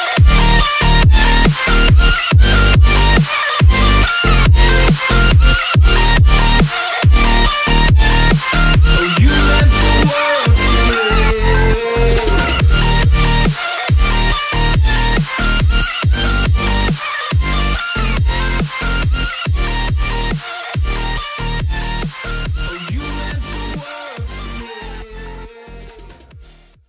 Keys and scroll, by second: 1.5 super+g, 2.9 super+b, 4.8 x, 5.3 Tab, 10.1 Tab, 10.6 space, 11.1 super+space, 11.2 super+space, 11.3 super+space, 11.3 super+space, 11.5 super+space, 11.5 super+space, 11.6 super+space, 11.7 super+space, 11.8 super+space, 11.8 super+space, 11.9-12.5 super+space, 15.8-16.7 typing, 17.8-20.3 typing.